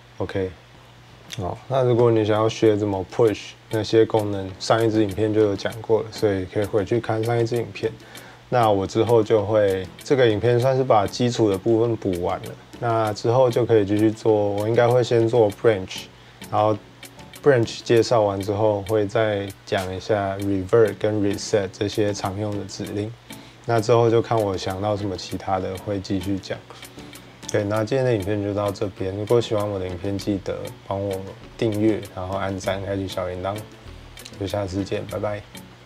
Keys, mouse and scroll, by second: 0.7 scroll.